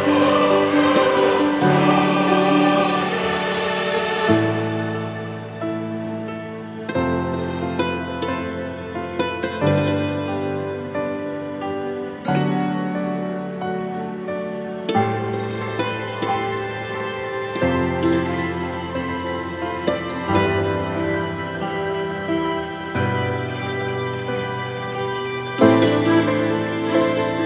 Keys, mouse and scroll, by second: 1.0-1.6 scroll up 3, 1.6-4.0 drag, 4.0-7.7 middle drag, 7.7 Tab, 8.0 a, 8.2 scroll down 3, 8.4 e, 9.3 click, 9.5 Tab, 9.8 scroll down 1, 10.0 z, 10.6-11.8 drag, 16.6 Tab, 16.7-22.1 middle drag, 22.1 Tab, 22.3-23.5 drag, 23.5 ctrl+z, 24.2 shift+d, 24.7-26.4 drag, 26.4-26.9 middle drag, 26.9 click, 27.2 scroll up 2, 27.3-27.4 shift+middle drag.